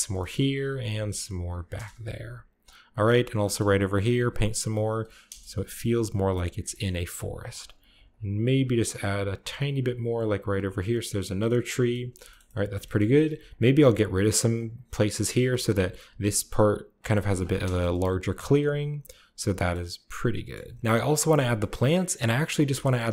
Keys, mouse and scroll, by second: 1.6 click, 1.6 KP_0, 1.8-2.9 drag, 2.6-4.0 middle drag, 3.6 shift+click, 4.1 shift+middle click, 4.2 shift+click, 4.3 shift+middle click, 4.7-6.1 shift+drag, 5.1 KP_0, 6.7 scroll up 1, 7.0-7.3 scroll down 1, 7.3-8.4 drag, 8.5 click, 8.6 click, 8.8 click, 8.9 click, 9.5 click, 9.6 click, 9.8 click, 10.1 click, 10.2 click, 11.1-12.8 scroll down 3, 11.3 middle click, 12.0 shift+middle click, 12.3 shift+middle click, 12.7 shift+middle click, 12.8 shift+middle click, 12.8-14.4 shift+scroll up 2, 13.3-15.3 ctrl+shift+middle drag, 15.3-17.0 drag, 17.0 middle click, 17.5 KP_0, 18.5-19.3 scroll up 1, 19.3 scroll down 1, 19.5-20.8 middle drag, 20.8 click, 21.6 shift+middle click, 22.0 shift+middle click, 22.2-23.1 shift+scroll up 1, 22.4 shift+middle click, 22.8-23.1 shift+middle drag.